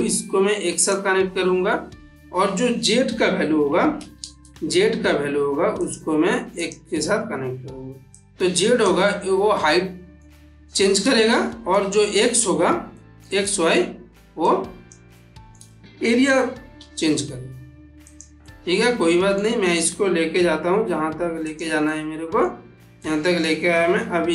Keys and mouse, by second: 4.0 shift+a, 5.7 click, 8.0-8.9 drag, 9.7-10.4 middle drag, 11.3-11.8 ctrl+middle drag, 14.3-14.9 click, 15.0-15.6 middle click, 16.7 g, 17.9 click, 18.3-19.2 middle drag, 20.2 g, 21.3 click, 21.7-22.3 middle click, 22.9-23.5 ctrl+middle click, 23.8 g.